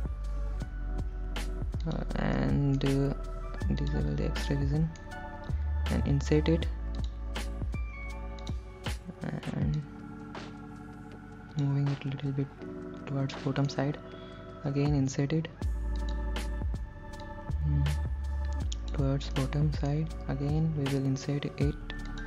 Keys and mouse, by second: 2.1 click, 2.6 middle click, 4.1 click, 4.7 middle click, 6.3 i, 7.2 click, 8.8 click, 10.0-11.9 drag, 13.6 middle click, 16.3 click, 17.5-19.2 drag, 19.6 middle click.